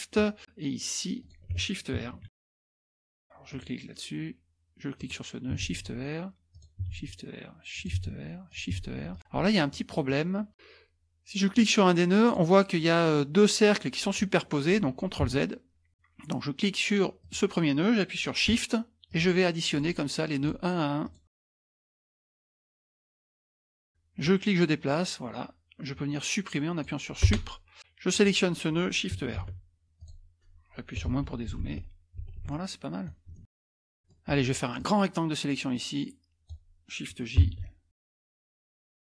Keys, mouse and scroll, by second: 1.2 shift+click, 2.3 shift+r, 2.4 click, 3.0 scroll down 1, 3.5 click, 5.0 click, 5.7 shift+r, 6.5 click, 6.9 shift+r, 7.7 click, 8.0 shift+r, 8.5 click, 8.8 shift+r, 9.1 click, 9.4-10.5 scroll up 1, 11.5-12.9 drag, 15.3 ctrl+z, 15.9 click, 17.2 click, 19.1 shift+click, 19.7 shift+click, 20.4 shift+click, 21.0 shift+click, 21.6 shift+click, 22.0 shift+middle click, 22.2 shift+click, 23.2 shift+click, 23.8 shift+click, 24.2-27.2 drag, 27.3 Delete, 28.1 click, 29.4 shift+r, 30.0 click, 31.1 KP_Subtract, 31.2 KP_Subtract, 31.4 KP_Subtract, 31.6 KP_Subtract, 31.8 KP_Subtract, 32.2 KP_Subtract, 32.5-33.0 scroll up 2, 32.7 middle click, 33.0 middle click, 34.8-37.0 drag, 37.4 shift+j, 38.2 click, 38.7 scroll up 1, 38.7 middle click.